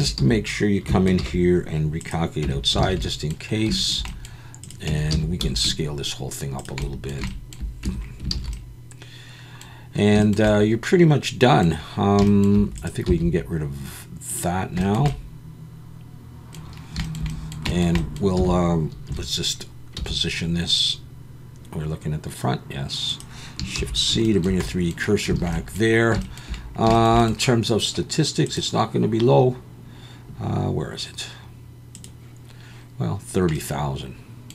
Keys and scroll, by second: 0.2 a, 1.2 alt+n, 2.4 Tab, 2.8 alt+a, 4.9 Tab, 5.1 a, 5.4 s, 7.8 Tab, 8.3 alt+a, 13.1 x, 18.4 a, 19.1 KP_1, 19.9 g, 23.8 shift+c, 25.4 alt+a.